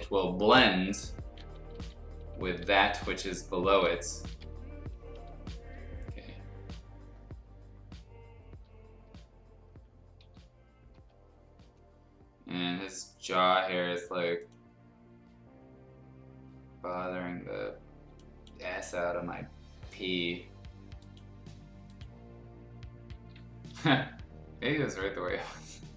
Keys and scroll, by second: 5.6 F2, 8.5 F2, 9.1 F2, 9.7 F2, 10.2 F2, 11.0 F2, 18.0 space, 23.9 b, 25.9 ctrl+z.